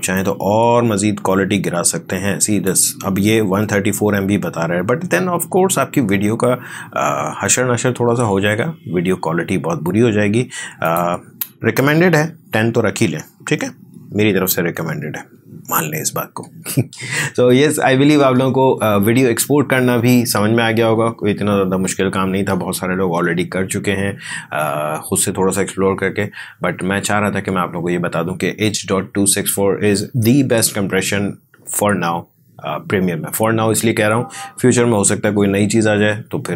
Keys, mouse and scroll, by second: 0.1-5.0 drag, 10.8 click, 13.7-14.1 typing, 14.8 Tab.